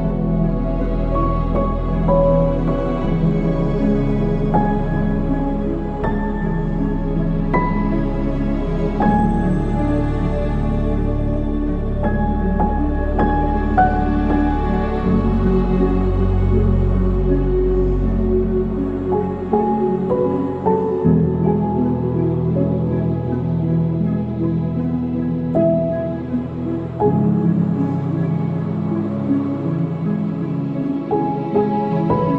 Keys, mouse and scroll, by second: 5.4 ctrl+z, 6.6 g, 10.6 shift+d, 11.6 g, 15.4 KP_3, 16.1-16.8 scroll down 1, 16.8-17.3 scroll down 1, 17.3 r, 19.7 click, 21.2 r, 23.3 ctrl+s, 24.0 KP_0, 26.4-28.4 drag, 29.1-29.4 drag, 31.7 click.